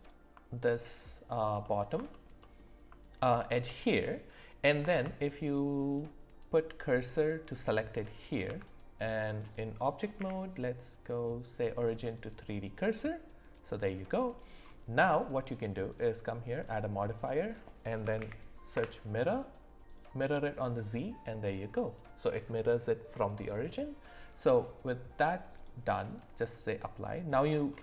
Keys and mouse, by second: 1.6 middle click, 3.4 shift+middle click, 4.9 shift+s, 8.5 Tab, 10.2 q, 13.0-14.3 middle drag, 15.0 middle click, 15.9 drag, 16.5-18.8 drag, 19.9 click, 20.5 click, 25.5 click.